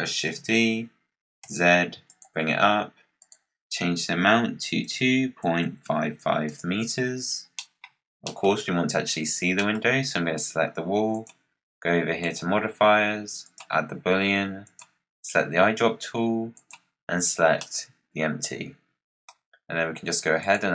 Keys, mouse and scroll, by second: 0.2 shift+d, 3.1-5.7 drag, 5.7 5, 7.5 middle click, 7.7 scroll down 3, 8.1 middle click, 8.4-9.5 scroll down 1, 9.5-9.9 middle drag, 9.9 click, 11.0 click, 12.1-14.7 drag, 17.5-20.3 middle drag, 20.3-20.7 drag.